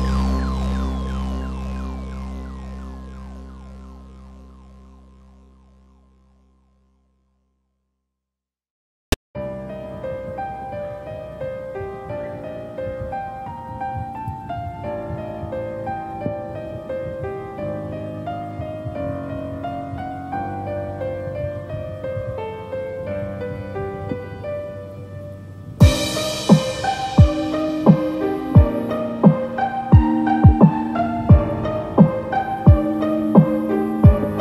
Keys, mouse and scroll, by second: 3.4-4.1 scroll up 5, 4.5-5.1 scroll down 6, 7.2 click, 8.4 click, 10.3 KP_0, 11.2 scroll up 3, 12.2 click, 12.8 click, 13.3-13.7 scroll up 3, 15.3 click, 27.2 scroll down 3, 29.3 click, 31.1 click, 31.7 shift+click, 32.0 shift+click, 33.4 h, 33.9 middle click, 34.3-34.4 scroll down 4.